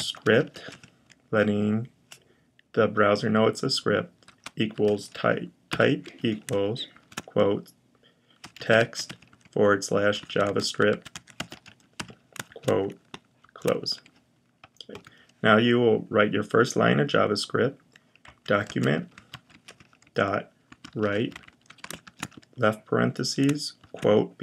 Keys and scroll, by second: 0.0-1.0 typing, 4.5-6.8 typing, 8.0-13.2 typing, 17.8-21.8 typing, 23.6 typing.